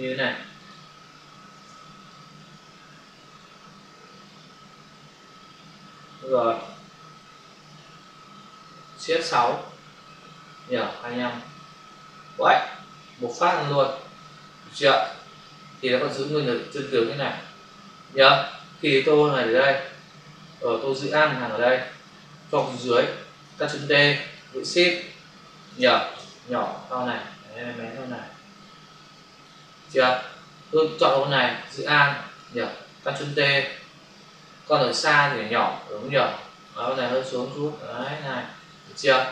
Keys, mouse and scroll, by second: 1.5 ctrl+d, 2.1 click, 7.4 shift+F5, 8.8 Escape, 9.4 shift+F6, 10.0 Return, 12.1 Delete, 13.4 ctrl+d, 14.9 v, 15.4 click, 19.5 click, 21.1 alt+click, 24.1 ctrl+t, 24.3 shift+click, 26.0 Return, 26.5 click, 30.9 ctrl+click, 31.0 ctrl+click, 31.5 alt+click, 34.1 shift+click, 36.9 click, 38.4 Return.